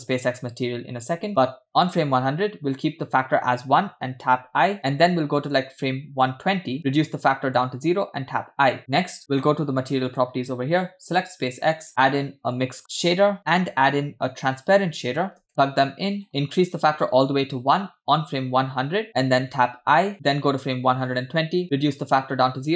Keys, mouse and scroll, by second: 4.7 i, 5.8 click, 6.9-7.9 drag, 8.2 i, 8.8 click, 10.1 click, 11.1 click, 11.9 click, 11.9 scroll down 2, 12.4 shift+a, 14.1 shift+a, 15.5 click, 16.2-17.8 drag, 19.1 click, 20.1 i, 21.4 drag, 22.0 click.